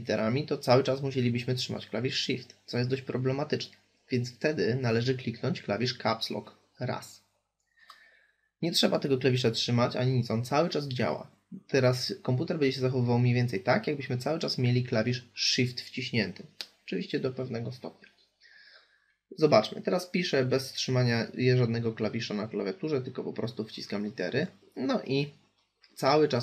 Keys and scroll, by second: 4.5 Caps_Lock.